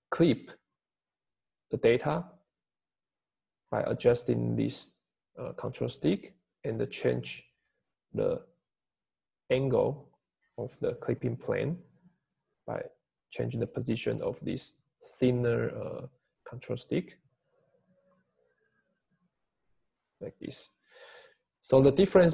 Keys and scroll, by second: 16.5 Home, 17.7 Home.